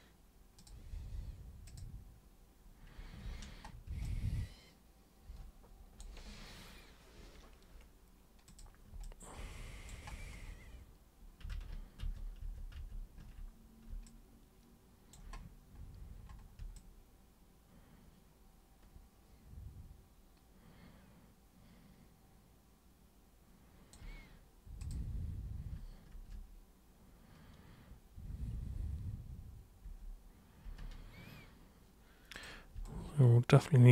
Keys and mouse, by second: 0.6 click, 1.6 click, 3.2 ctrl+1, 4.0-6.0 alt+drag, 8.4 super+click, 9.0 alt+super+click, 11.5 ctrl+super+z, 12.0 ctrl+super+z, 12.4 ctrl+super+z, 12.7 ctrl+super+z, 14.0-15.1 alt+super+drag, 16.7-23.9 alt+super+drag, 24.8 super+click, 26.1 ctrl+super+1, 29.8 ctrl+super+1, 30.6 ctrl+super+1, 32.3 super+click, 32.8-33.9 alt+super+drag.